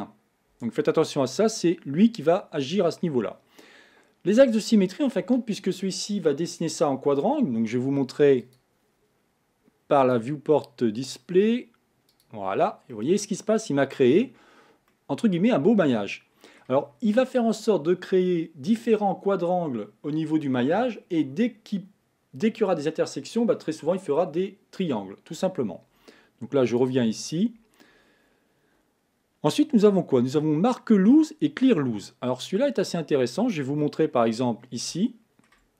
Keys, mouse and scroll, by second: 0.5 Tab, 8.4 click, 10.0-12.2 drag, 12.9-14.3 middle drag, 14.3 scroll up 4, 14.9-16.9 middle drag, 16.9-20.0 scroll down 3, 26.8 click, 32.3 middle click, 32.8-33.8 scroll up 5, 33.8 shift+middle click, 34.4 scroll up 4, 35.0-35.7 shift+middle drag.